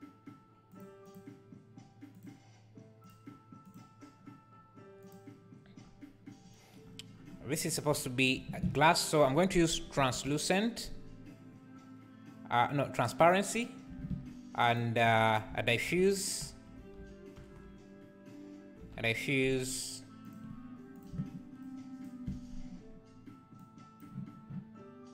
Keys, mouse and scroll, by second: 3.1-3.7 drag, 5.2-7.7 drag, 7.9 x, 10.0 shift+a, 20.3 BackSpace, 22.1-23.6 ctrl+shift+right drag, 23.6 click.